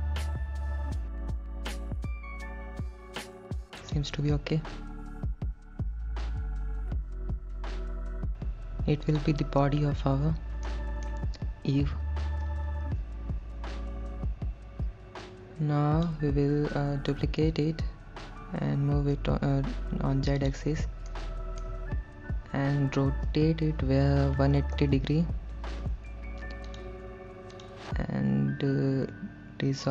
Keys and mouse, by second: 3.8 click, 5.4 click, 6.3 g, 8.0 z, 9.1 click, 10.7 middle click, 12.9 KP_1, 13.6-16.5 drag, 17.6 shift+d, 19.4 z, 20.5 click, 21.2 shift+middle click, 23.5 r, 24.7 KP_1, 25.0 KP_8, 25.1 KP_0, 26.9 click, 27.7 click, 29.1 x.